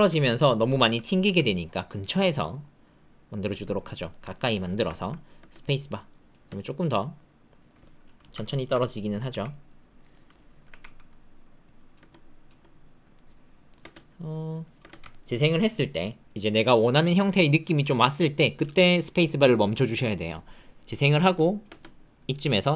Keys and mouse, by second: 1.2 g, 3.6 click, 4.1 shift+click, 4.3 ctrl+click, 4.7 shift+click, 4.9 ctrl+click, 5.3 space, 6.3 space, 6.6-7.6 drag, 8.4 alt+click, 9.2 g, 10.6 g, 11.9 space, 12.4 space, 13.1 middle click, 13.8 space, 14.7 space, 15.1 alt+middle click, 21.2 space, 21.6 space, 22.4-22.7 middle drag.